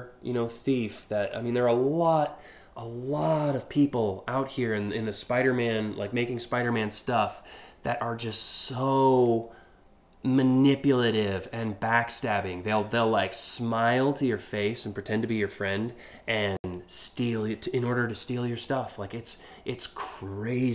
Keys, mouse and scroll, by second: 0.0-1.0 drag, 1.3 click, 1.7 click, 6.8-7.5 drag, 7.9 click, 18.2 click, 19.6-20.6 drag.